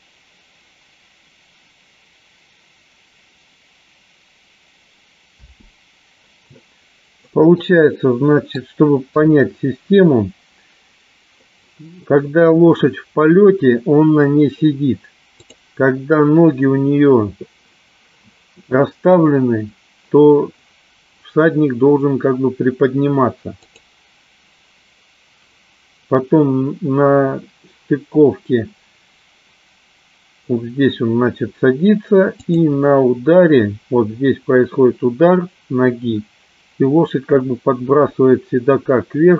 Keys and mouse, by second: 6.0 space, 7.7-8.7 middle drag, 9.3 KP_3, 16.0 click, 24.2 click, 32.9 click.